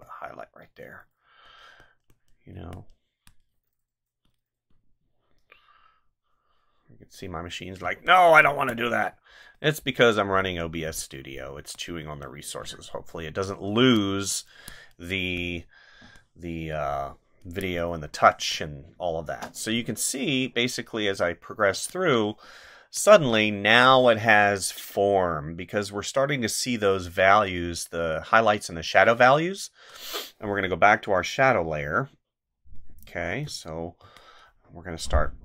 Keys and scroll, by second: 2.5 space, 8.4 space, 11.6 space, 13.8 space, 17.4 space, 21.7 space, 33.4 ctrl+z.